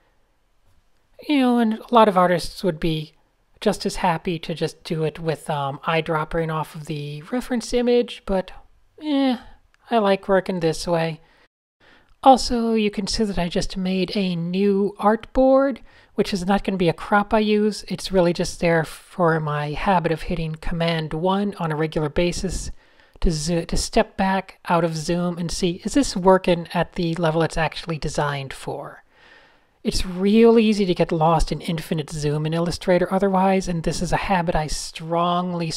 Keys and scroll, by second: 0.1 n, 1.0 a, 1.3 super+space, 2.9 super+0, 3.8 shift+o, 6.4 super+0, 6.9 Tab, 7.9 super+0, 8.2 Tab, 9.7 v, 10.2 shift+Left, 10.3 shift+Left, 10.5 shift+Left, 12.4 super+space, 12.5-12.8 super+space, 13.3 Tab, 13.7 Tab, 14.4 n, 16.1 Tab, 16.3 Tab, 17.2 super+space, 24.6-25.0 typing, 25.8 super+z, 27.3-31.9 typing, 33.3-35.7 typing, 33.9 shift+super+a.